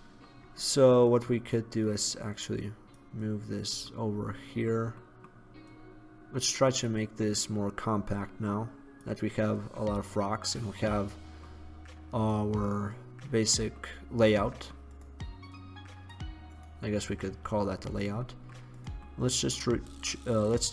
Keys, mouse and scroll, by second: 2.7-3.1 middle drag, 4.2-5.8 middle drag, 4.8 drag, 5.8-6.7 drag, 10.3-12.3 middle drag, 13.9-14.3 middle drag, 14.3 click, 18.3 scroll up 2, 18.4 middle click, 18.9 right drag, 20.1-20.7 drag, 20.1-20.7 right drag.